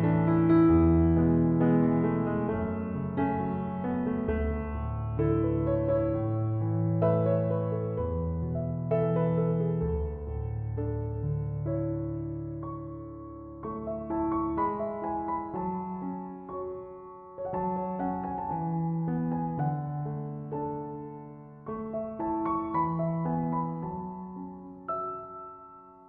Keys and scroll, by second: 16.5 typing, 22.7 BackSpace, 24.2 BackSpace.